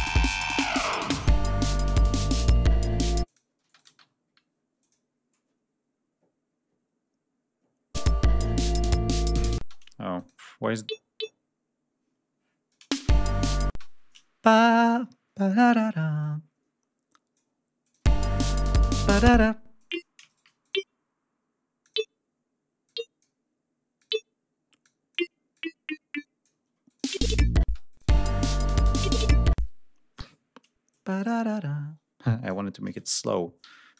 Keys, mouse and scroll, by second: 0.3 ctrl+scroll up 2, 1.5 ctrl+scroll down 2, 1.8 ctrl+scroll up 3, 3.1 click, 3.5 space, 3.6 click, 3.9 scroll up 2, 4.7 click, 7.8 click, 9.4 space, 10.0 click, 12.5 click, 12.8 space, 13.6 space, 14.6 d, 14.9 ctrl+scroll up 2, 16.1-17.4 drag, 17.7 click, 17.9 space, 19.2 space, 19.6 click, 20.2 shift+right click, 20.4 shift+click, 21.6 click, 22.7-23.2 drag, 23.8 click, 24.6 click, 25.3-26.4 drag, 26.6 click, 26.9 space, 27.7 click, 29.3 space, 30.0 g, 30.7-32.5 drag, 32.7 click, 33.4 g, 33.7 click.